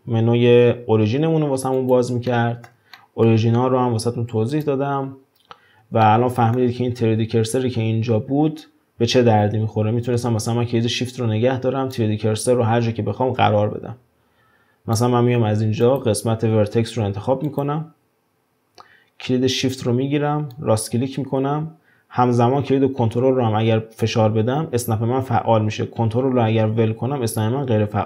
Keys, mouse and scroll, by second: 2.3-3.6 middle drag, 3.6-4.5 scroll up 1, 4.5 click, 6.0-9.1 shift+middle drag, 11.9-14.9 shift+right drag, 15.8-18.9 drag, 20.5-23.5 shift+right drag.